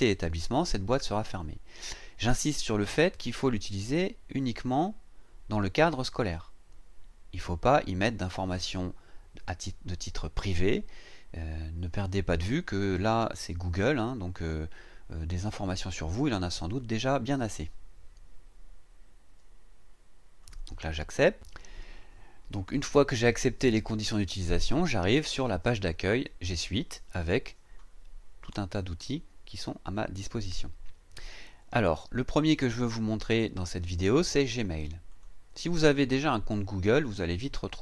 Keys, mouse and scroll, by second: 20.4 click, 28.8 scroll down 2, 29.7 scroll down 2, 30.7 scroll down 2, 31.2-32.1 scroll up 2, 32.9 scroll up 2, 35.1 click.